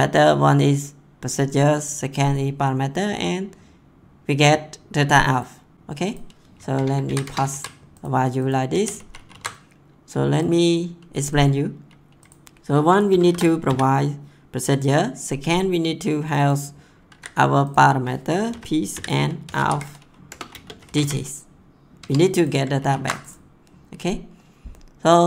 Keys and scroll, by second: 6.7 Return, 7.0 ctrl+v, 7.2 Return, 7.5 ctrl+s, 8.7 ctrl+x, 9.0 ctrl+s, 13.1 shift+', 13.6 ', 17.1 ctrl+c, 18.5-21.4 typing, 20.3 Return, 22.0 Tab, 22.8 ctrl+s.